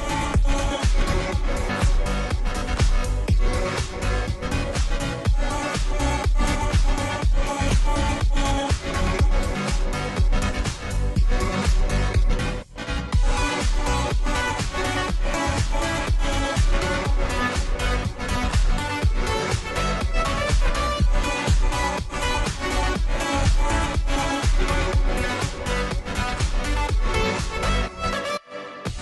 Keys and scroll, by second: 4.6 Return, 25.5 ctrl+h.